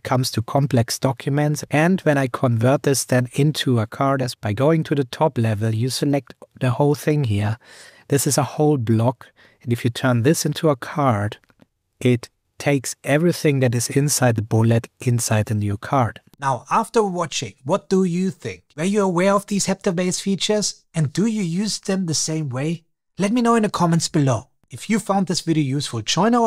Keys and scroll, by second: 1.6 super+Return.